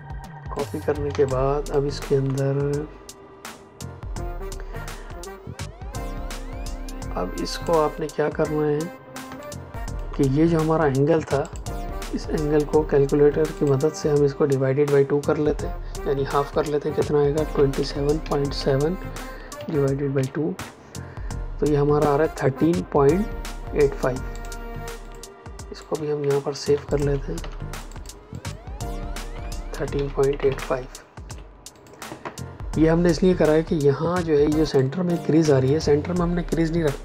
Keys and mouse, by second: 0.5 click, 1.0 space, 1.2 click, 1.5 space, 7.4 click, 9.2 space, 9.3 click, 9.7 space, 11.4 click, 14.7 Escape, 17.4 KP_2, 17.7 KP_7, 18.1 KP_Decimal, 18.5 KP_7, 19.5 KP_Divide, 20.1 KP_2, 20.5 KP_Enter, 24.3 click, 26.8 click, 27.3 t, 27.6 click, 29.2 KP_1, 29.8 KP_Decimal, 30.2 KP_8, 31.2 Escape, 31.6 click, 34.7 click.